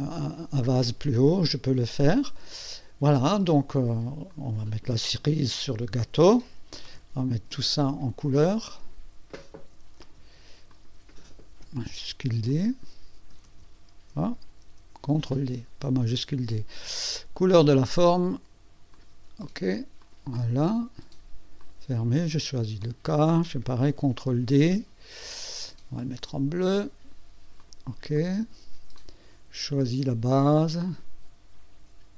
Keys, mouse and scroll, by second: 1.3-3.4 drag, 4.3 click, 6.8 shift+d, 8.4 click, 9.9 shift+d, 10.7 click, 11.9 shift+d, 12.5 shift+click, 13.4 shift+d, 14.6 ctrl+d, 17.5 click, 18.9 click, 20.0 click, 21.6 click, 22.8 click, 23.9 ctrl+d, 25.3 click, 26.6 click, 27.6 click, 28.1 click, 28.9 click, 30.9 click.